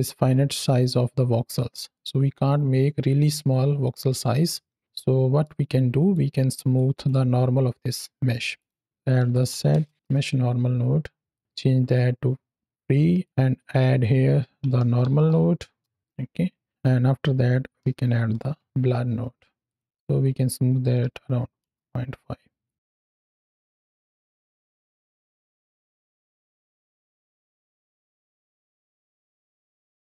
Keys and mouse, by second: 4.8-5.3 middle drag, 6.0-6.4 drag, 6.6 click, 8.5 click, 8.8 shift+a, 11.2 click, 11.4-12.7 drag, 13.1 click, 13.4-13.9 drag, 16.6 click, 19.5 click, 19.8-21.6 drag, 22.5 click, 22.7 alt+middle click, 23.1 alt+a, 23.4-23.8 middle drag, 23.9 space, 25.0 shift+Left, 29.0-29.8 middle drag.